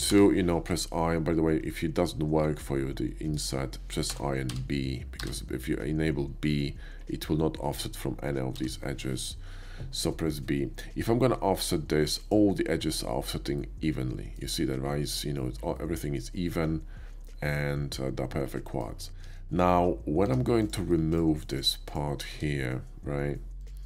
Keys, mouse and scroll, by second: 0.0 i, 3.4 right click, 4.2 i, 4.5 b, 5.4 i, 8.7 b, 12.2 click, 12.5 middle click, 13.5 middle click, 15.7-18.8 middle drag, 19.2 ctrl+z, 20.3 Tab, 20.6 click, 21.1 ctrl+click, 21.5 ctrl+click, 21.9 ctrl+click, 22.2 x, 23.5 click.